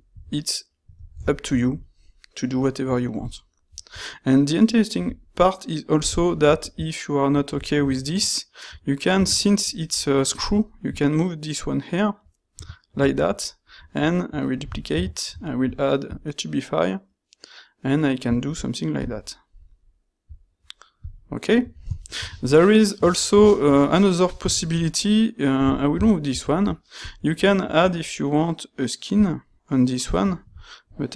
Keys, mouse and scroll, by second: 0.2 z, 5.9 shift+x, 14.7 shift+d, 15.5 ctrl+shift+q, 21.2-22.0 middle drag, 22.2 shift+middle click, 22.4-23.2 ctrl+middle drag, 23.4-23.7 shift+middle drag, 24.0-24.5 shift+middle drag, 25.6 x, 30.3 middle click.